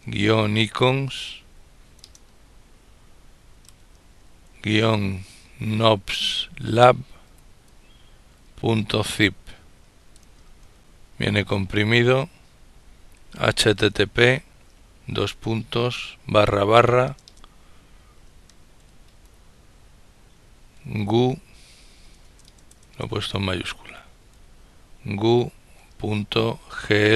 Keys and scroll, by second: 0.0-7.1 typing, 8.3 typing, 9.9-10.9 typing, 12.8-14.0 typing, 16.0-18.2 typing, 20.3-24.2 typing.